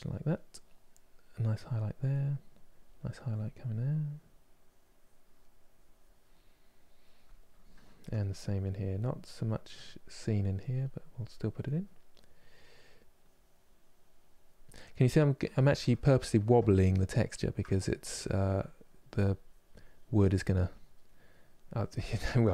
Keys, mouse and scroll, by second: 0.0 middle click, 0.7-6.0 drag, 6.0-8.1 middle drag, 8.1-11.3 drag, 11.3-12.8 middle drag, 12.8-14.6 drag, 14.6-18.8 middle drag, 18.8-20.7 drag, 20.7 middle click, 21.3 click, 21.9 shift+middle click.